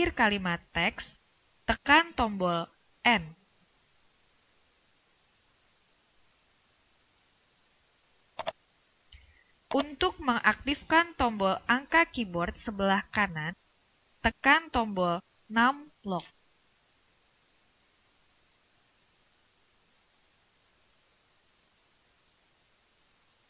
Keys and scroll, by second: 4.5 End, 14.3 Num_Lock.